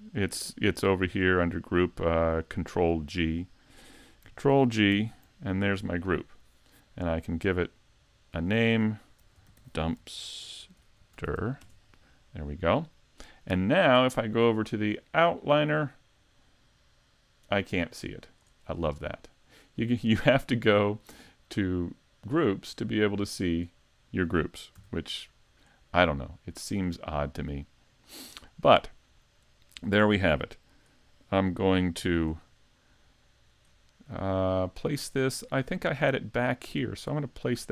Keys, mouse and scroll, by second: 0.0 click, 4.9 ctrl+g, 8.4 click, 15.7 click, 20.1 click, 24.8 click, 24.8 a, 25.2 middle click, 26.6 click, 27.3 middle click, 29.0-29.8 scroll down 1, 29.8 scroll down 2, 32.0 `, 32.3 scroll down 2, 32.8 middle click, 33.7-34.2 scroll up 2, 34.2 shift+middle click, 34.2 scroll up 1, 35.3 scroll down 1, 35.7 middle click, 37.4 middle click.